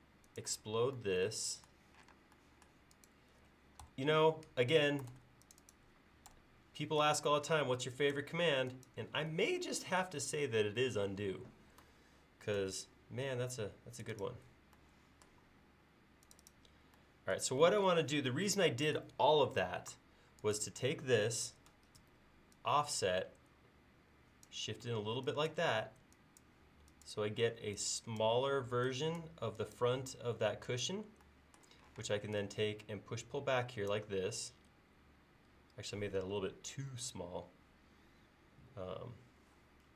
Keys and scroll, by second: 2.1 space, 3.9 BackSpace, 5.1 super+z, 6.3 BackSpace, 7.4 e, 12.6 a, 17.8 space, 22.0 f, 24.9 e, 31.9 p.